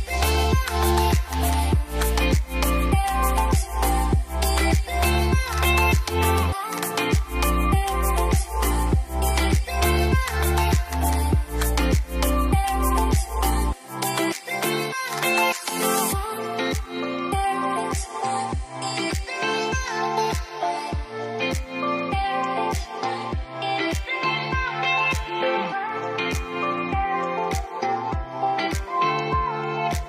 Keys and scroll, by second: 4.4-5.3 typing, 13.1-13.9 typing, 25.4 ctrl+d.